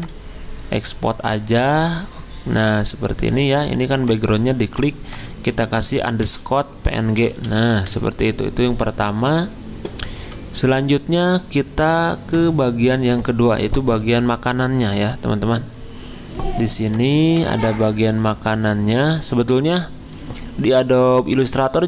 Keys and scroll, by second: 6.2-11.8 typing, 17.7 alt+Tab.